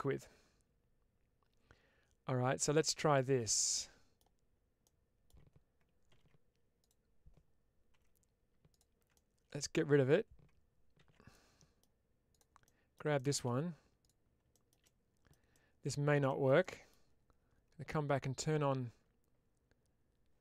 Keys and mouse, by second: 4.7 middle click, 9.0 middle click, 10.9 ctrl+x, 11.2 middle click, 12.5 middle click, 13.9 click, 14.7 middle click, 15.4 middle click, 16.5 middle click.